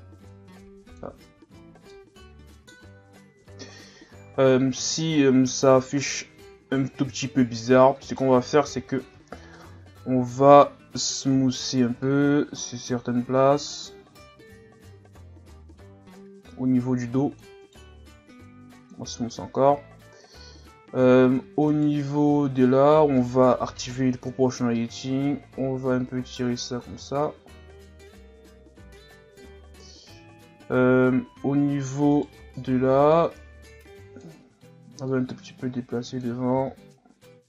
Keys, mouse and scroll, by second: 0.3 click, 1.2 Tab, 1.6 scroll down 4, 1.9-3.4 middle drag, 3.4 KP_3, 4.4 scroll up 2, 5.2 scroll down 4, 5.7 scroll up 3, 7.0-7.7 scroll down 3, 7.7 scroll up 1, 8.0 right click, 8.7 z, 9.2-9.6 scroll up 2, 9.6 Tab, 9.9 scroll up 2, 11.1 right click, 11.3 c, 18.1 w, 21.7 alt+right click, 23.7 o, 24.6-27.2 drag, 27.2 scroll down 5, 29.1-30.8 scroll down 6, 30.8 scroll down 1, 32.1 right click, 32.5 b, 35.1-36.5 drag, 36.5 r.